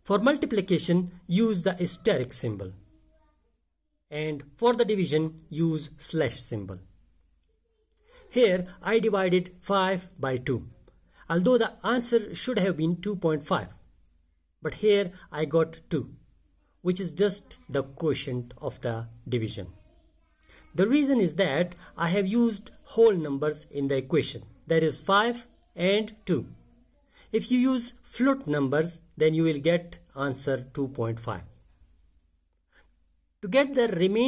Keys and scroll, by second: 0.4 shift+8, 1.9 3, 3.2 Return, 5.9 5, 6.3 /, 7.2 2, 9.2 Return, 32.5 5.